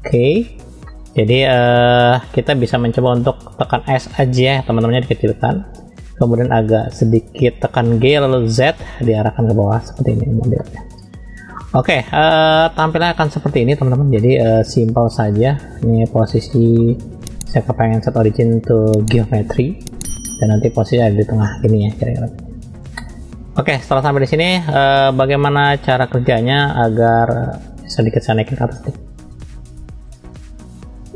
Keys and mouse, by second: 0.0 n, 0.9 middle click, 4.7 s, 7.8 g, 10.6 middle click, 11.6 shift+middle click, 13.0 click, 14.1-14.4 middle drag, 16.5 middle click, 17.6-21.2 drag, 21.4-23.9 middle drag, 25.9-26.2 shift+middle drag, 26.5-27.2 middle drag, 28.0 click, 30.8-31.1 drag.